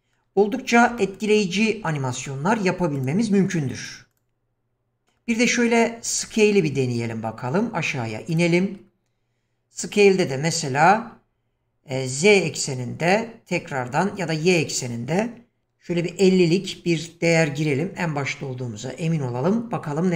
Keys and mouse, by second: 1.1 shift+middle drag, 1.9-2.9 shift+right drag, 2.9 click, 4.1 click, 5.0 middle click, 6.3 shift+middle click, 9.8 click, 14.5-17.1 drag.